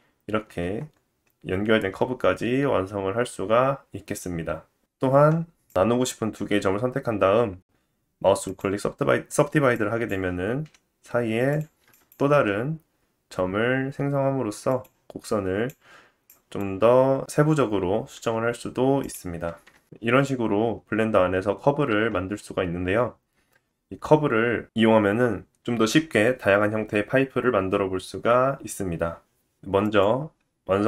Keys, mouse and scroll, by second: 0.6 Tab, 5.1 click, 5.2 Tab, 7.5 right click, 9.8 click, 10.7 f, 11.6 click, 12.3 g, 15.0 click, 16.3 click, 19.2 g, 19.7-22.7 drag, 29.8 click.